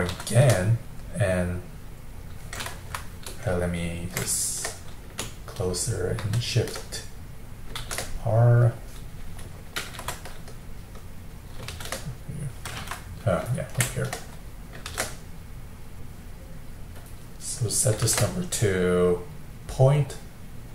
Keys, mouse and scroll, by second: 0.1 shift+r, 3.6-6.2 ctrl+middle drag, 6.2 shift+r, 10.9 middle click, 11.7 shift+r, 13.0-14.9 middle drag, 14.9 shift+r, 18.1 shift+r.